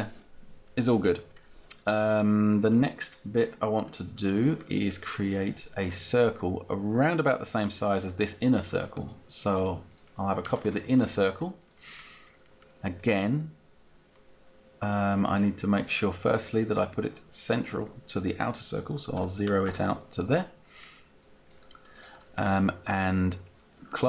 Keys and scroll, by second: 19.0 0, 19.5 Return.